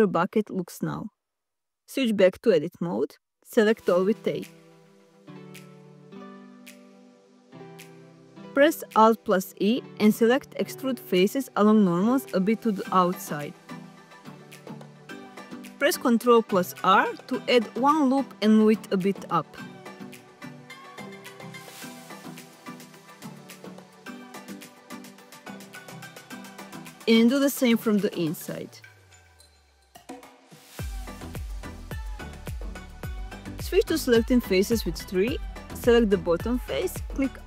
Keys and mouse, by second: 1.2 Tab, 2.7 click, 3.2 ctrl+z, 9.0 alt+e, 14.9 shift+click, 15.6 ctrl+r, 16.1 click, 23.6 shift+click, 25.5 middle click, 27.4 ctrl+r, 28.0 click, 30.7 click, 31.6 middle click, 35.6 3.